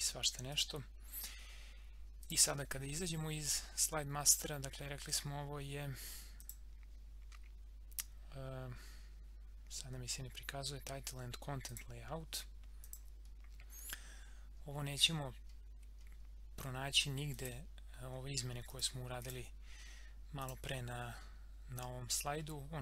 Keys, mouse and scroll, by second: 6.3 click, 11.7 click, 13.3 scroll down 1, 16.6 scroll down 1, 17.3 click, 18.0 scroll down 1, 18.7 click, 19.6 scroll down 1, 20.4 click, 20.7 scroll up 1, 22.2 scroll down 1.